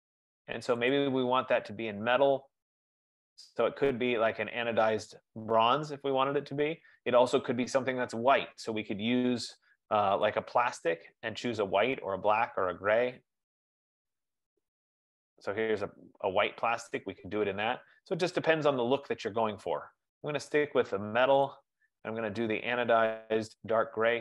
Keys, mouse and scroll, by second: 1.1 click, 5.3 click, 10.5 click, 12.2-12.5 scroll, 12.9-13.5 scroll, 13.5-14.5 scroll, 18.7 click, 19.9 click, 21.6 click.